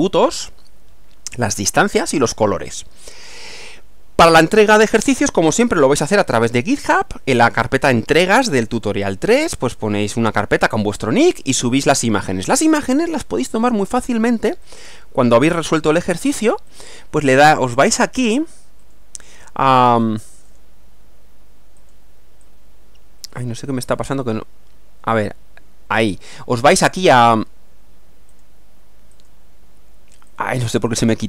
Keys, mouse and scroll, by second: 13.0 click, 14.7 click, 16.7 click, 18.2 click, 18.8 click, 19.8 click, 20.5 click, 21.8 click, 22.4-24.1 drag, 27.1 click, 28.3 click, 29.1 click, 30.3 click, 30.9 click.